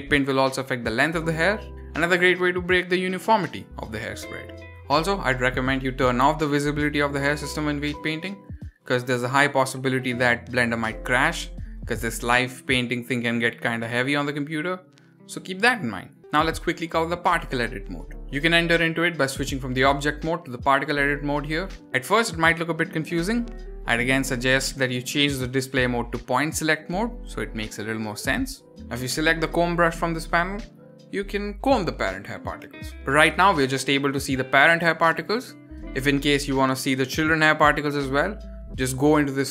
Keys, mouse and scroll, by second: 0.0-2.3 middle drag, 0.0 scroll up 2, 2.3 scroll down 2, 2.6-3.4 middle drag, 3.7-4.0 shift+middle drag, 4.3 scroll up 3, 4.7 click, 11.8 click, 12.2-12.8 scroll up 1, 12.8 click, 12.8 scroll up 1, 13.5 click, 18.2 shift+middle click, 18.2 click, 18.2 scroll up 1, 19.2-20.9 drag, 21.5-21.9 middle drag, 22.0 shift+middle drag, 22.4 scroll up 3, 22.9 middle click, 23.4-23.7 shift+middle drag, 25.8 click, 26.4 middle drag, 26.7 shift+middle drag, 27.1 scroll up 2, 27.2 shift+middle click, 27.5 scroll down 3, 27.6-28.5 shift+middle drag, 30.9 click, 31.7-32.1 scroll up 2, 32.1 shift+middle click, 32.6 click, 33.2 click, 33.9 click, 34.6 click, 35.2 click, 35.8 click, 36.5 click, 37.4 ctrl+z, 37.6 ctrl+z, 37.7 ctrl+z, 37.9 ctrl+z, 38.1 ctrl+z, 38.3 ctrl+z, 38.4 shift+middle click.